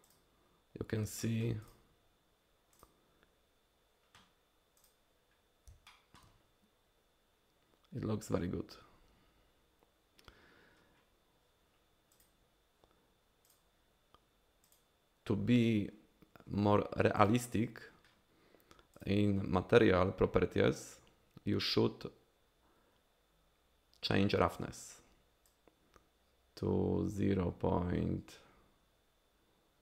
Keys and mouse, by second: 1.2 shift+drag, 1.6 click, 4.8 click, 5.9 shift+middle drag, 13.5 click, 17.2 click, 25.6-29.8 drag.